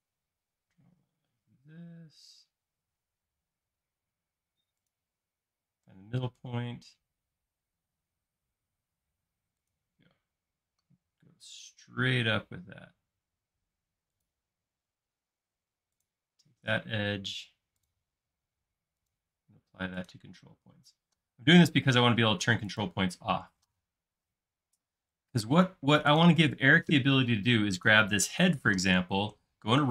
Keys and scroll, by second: 5.7 |, 14.7 space, 29.2 q.